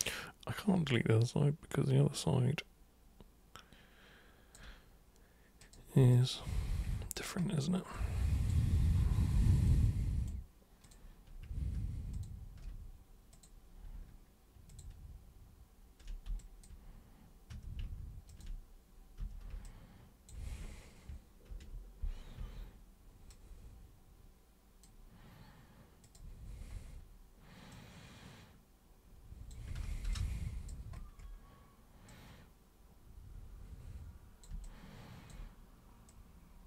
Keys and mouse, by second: 5.6 super+click, 6.1-7.1 alt+super+drag, 6.8 alt+super+=, 7.9 alt+super+click, 9.6 super+right click, 10.8 super+click, 12.1 shift+super+click, 13.3 super+click, 14.6 ctrl+shift+super+click, 16.4 alt+super+drag, 17.4 super+q, 18.3 ctrl+shift+super+click, 19.1 super+w, 19.6 alt+super+click, 21.4 ctrl+super+e, 22.3 super+w, 23.2-24.8 super+drag, 26.0 super+click, 27.7-29.4 super+drag, 29.8 super+z, 30.1 alt+super+space, 30.1 alt+super+click, 36.0-36.6 super+drag.